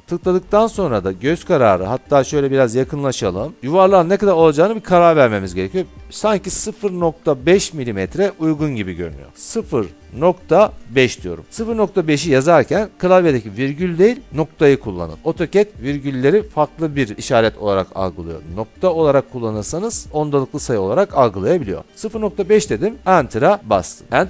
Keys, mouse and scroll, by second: 1.9 scroll, 2.2 scroll down 1, 2.4 scroll up 1, 3.1 scroll up 1, 6.2 scroll, 9.7-11.1 typing, 23.1 Return.